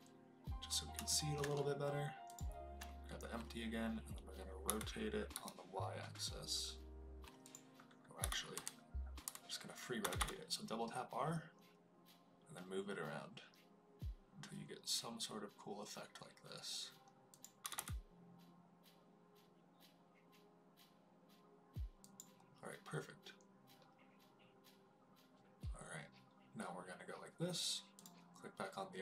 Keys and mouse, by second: 1.0 shift+middle drag, 4.6 r, 5.3 y, 7.4 click, 8.1-10.1 typing, 17.3 click, 17.6 r, 17.7 r, 22.0 click, 27.9 click.